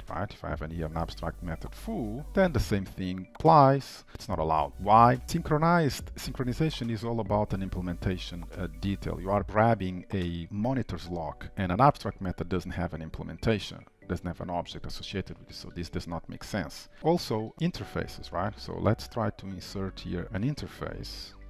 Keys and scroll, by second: 17.0 ctrl+/.